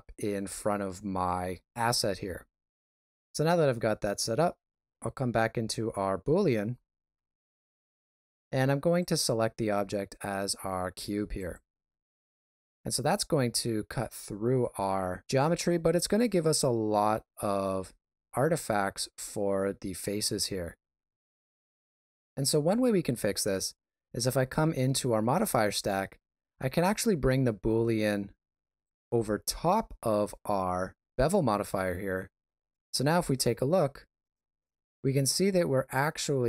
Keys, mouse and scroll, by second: 3.0 right click, 4.9 click, 6.0 middle click, 9.0 click, 12.4 middle click, 20.1 shift+z, 21.6 shift+z, 28.8 click, 32.4 shift+z, 33.2 ctrl+middle click, 35.7 middle click.